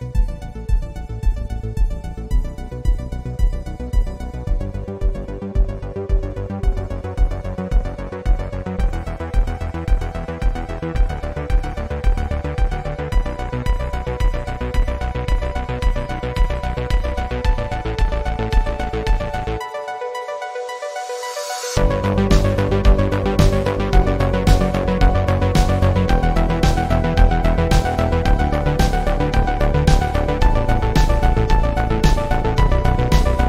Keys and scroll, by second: 2.2 alt+Right, 3.3 ctrl+Return, 5.2 alt+Right, 7.2 ctrl+Return.